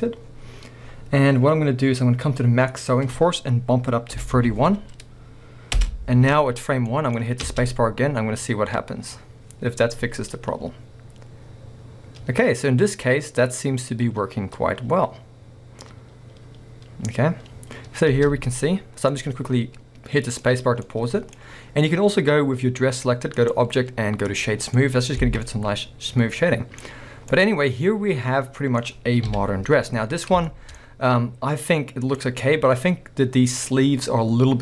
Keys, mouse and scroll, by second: 2.7 click, 5.8 Return, 6.9-12.4 middle drag, 7.5 space, 18.6-19.1 scroll down 2, 19.1-20.5 middle drag, 20.5 scroll up 2, 20.6-23.4 middle drag, 23.4 click, 24.6 scroll down 2, 24.8-32.1 middle drag, 25.3 alt+a, 26.9-27.4 scroll up 2, 29.3 KP_1, 29.8-30.5 scroll up 2, 30.9-32.1 scroll up 2, 32.1 click.